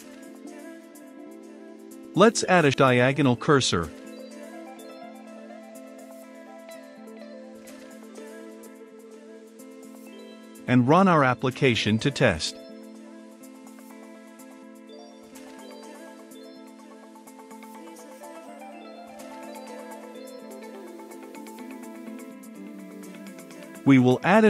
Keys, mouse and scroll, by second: 0.3 click, 1.6 Return, 1.8-4.0 typing, 3.8 Return, 5.5-9.4 typing, 9.6 Down, 10.1 Return, 11.1-20.9 drag, 20.9 Return, 21.5-22.8 typing, 22.9 Down, 24.0 Return.